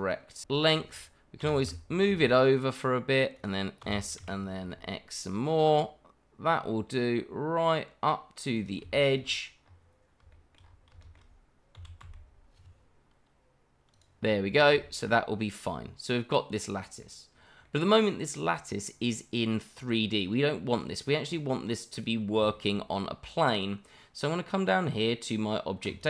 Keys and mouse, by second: 0.5 shift+middle drag, 1.4 g, 1.6 y, 2.1 x, 3.8 s, 4.2 y, 4.6 x, 8.5 click, 8.9 shift+middle drag, 10.3 shift+middle drag, 11.0 shift+middle drag, 11.7 s, 12.0 x, 13.9 click, 14.8 shift+middle click, 15.5-17.0 middle drag, 17.6 middle drag, 19.1-20.5 middle drag, 20.7 click, 21.9 click, 22.5 shift+middle drag, 23.0-23.5 middle drag, 25.8 click.